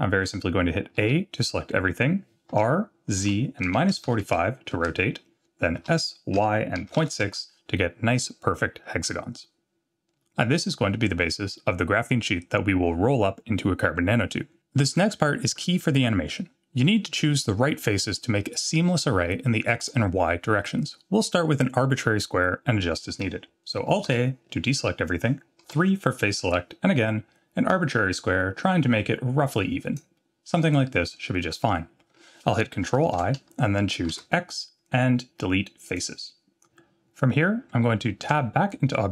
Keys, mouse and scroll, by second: 1.0 a, 2.5 r, 5.8 s, 24.1 alt+a, 25.7 3, 27.7-30.0 drag, 33.1 ctrl+i, 34.1 x, 38.2 Tab.